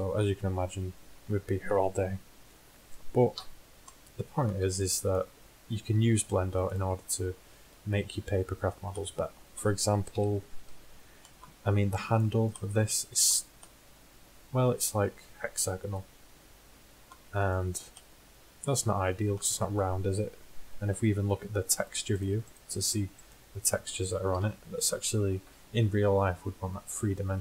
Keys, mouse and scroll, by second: 0.1 middle click, 3.4 z, 6.3 Tab, 7.7 Tab, 10.2 Tab, 10.7 Tab, 14.8-15.8 middle drag, 16.8 middle click, 17.1 middle click, 22.1 click, 23.5 click, 24.4 KP_1.